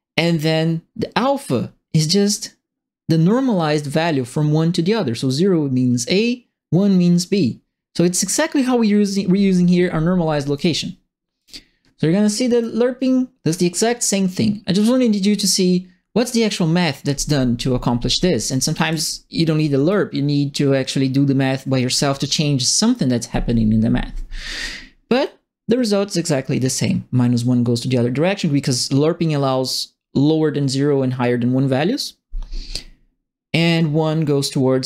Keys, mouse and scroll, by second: 0.1 right click, 9.8 click, 11.3 click, 12.5 click, 13.4 click, 16.4 click, 18.4-19.3 typing, 18.5-19.8 right drag, 25.2-34.8 drag.